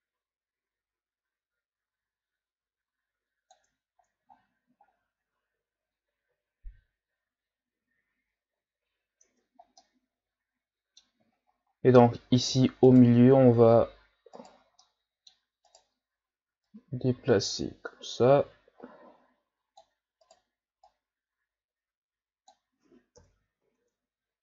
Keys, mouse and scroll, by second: 3.7 Tab, 4.4-5.2 scroll down 1, 5.2 Tab, 9.2 Tab, 9.8-11.3 middle drag, 11.3-11.9 shift+scroll up 3, 11.9 Tab, 12.8 alt+right click, 14.4 alt+right click, 14.8 middle click, 15.7 right click, 16.7-19.8 drag, 20.2 right click, 20.8-23.2 drag, 23.2 KP_1, 23.6 Tab.